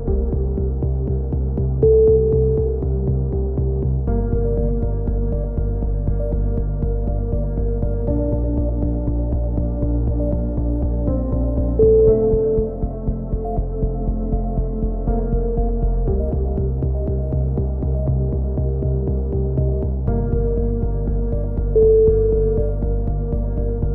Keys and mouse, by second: 0.2 z, 0.7 Tab, 1.5 x, 2.0-5.3 drag, 5.3-6.1 typing, 8.9 ctrl+KP_7, 9.9-13.8 drag, 13.8 a, 14.0-14.6 drag, 16.0-16.5 drag, 16.5 KP_3, 16.8 z, 17.5-18.5 right drag, 17.9 z, 18.5-18.9 drag, 18.9 middle click, 19.6 a, 19.7 z, 20.5-21.3 drag, 21.3 z, 21.5 z, 23.2 z, 23.3 click.